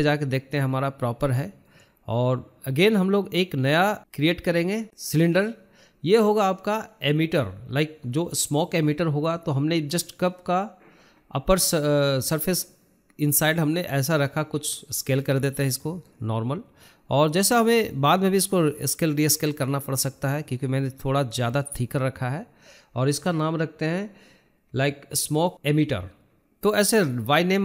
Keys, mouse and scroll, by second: 0.5-0.9 scroll up 3, 0.9-1.4 shift+middle drag, 1.4 KP_0, 3.1 n, 3.2-3.6 scroll down 2, 3.6-4.5 scroll up 5, 4.5-5.1 middle drag, 5.1 scroll up 1, 5.4-6.2 shift+middle drag, 6.2 drag, 7.8 shift+a, 11.7-13.0 shift+middle drag, 13.0 g, 14.4 s, 17.6 g, 18.8 scroll down 2, 18.9-19.3 middle drag, 19.3 scroll up 6, 19.5-21.2 shift+middle drag, 21.2 s, 23.1 scroll down 2, 23.2-25.0 middle drag, 25.0 click, 25.2 scroll down 1, 25.4-26.1 middle drag, 26.1 click, 26.4-27.6 shift+middle drag.